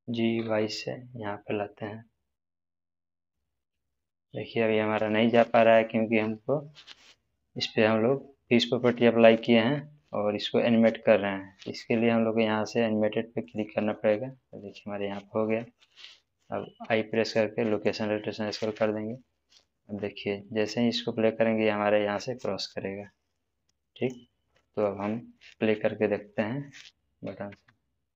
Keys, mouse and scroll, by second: 0.0 g, 0.3 y, 3.1 y, 5.2 click, 13.4 click, 17.7 click, 19.6 middle click, 20.7-24.1 drag.